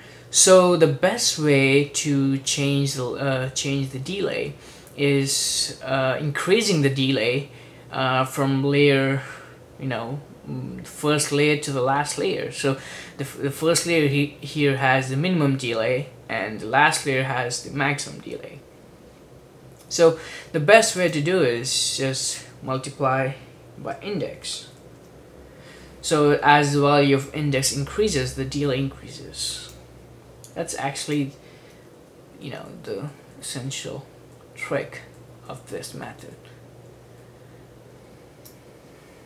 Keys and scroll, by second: 23.7-25.6 typing, 32.0 super+d, 32.4 super+d, 32.7 super+d, 32.9 super+d, 33.1 super+d, 33.3 super+d, 33.7 super+d, 33.7 super+d, 34.7 super+d, 35.7 super+d, 36.0 super+d, 36.3 super+d, 37.2 super+d.